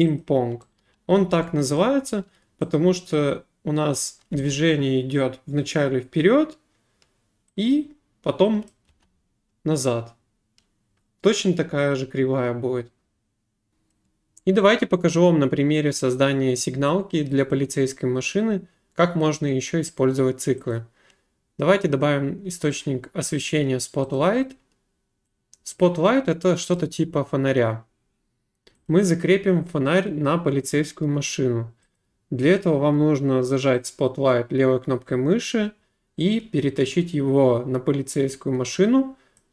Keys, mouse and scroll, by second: 0.2 click, 1.3 s, 1.7 right click, 4.0 click, 4.3 space, 8.7 click, 8.9 space, 13.7 Delete, 13.8 click, 20.7 click, 24.2 click, 26.8 click, 28.9 click, 32.0 click, 39.4 click.